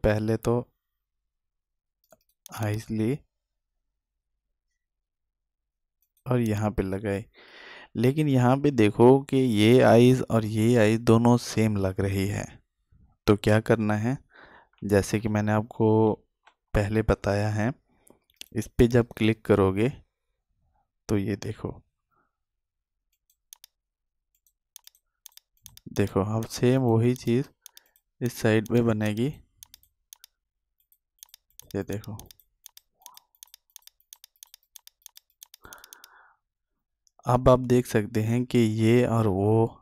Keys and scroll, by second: 16.5 ctrl+z.